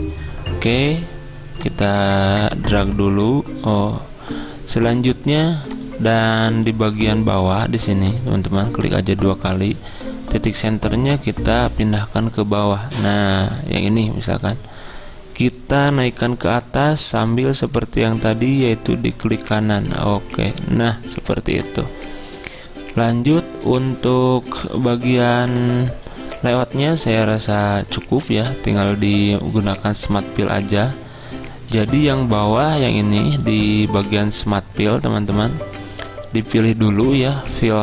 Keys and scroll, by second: 25.2 z.